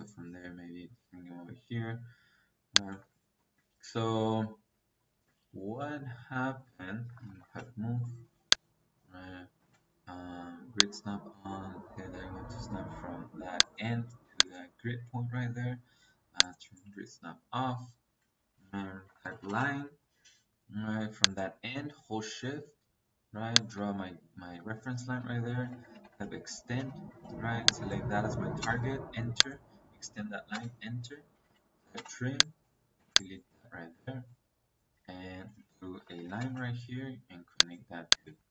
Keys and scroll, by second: 2.9 Escape, 4.2 Escape, 7.0 m, 7.3 o, 7.5 e, 7.5 space, 9.5 space, 18.1 Escape, 18.9 l, 19.2 i, 19.4 n, 19.5 space, 24.9 Escape, 25.5-27.0 typing, 28.5 space, 30.4 space, 31.3 t, 31.5 r, 31.8 space, 32.9 space, 33.5 Escape, 35.9 l, 36.1 i, 36.3 n, 36.5 space, 38.1 Escape.